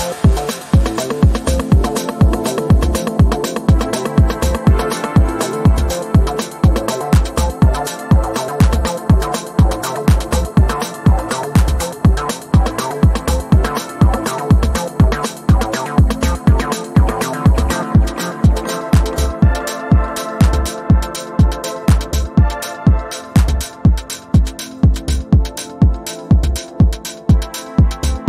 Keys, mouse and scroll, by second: 0.8-5.7 drag, 6.4 ctrl+z, 7.4-8.6 drag, 9.6 right click, 11.2 click, 17.1 click, 18.8-20.5 typing, 21.4-22.6 drag, 24.5 ctrl+z, 25.0-26.8 drag.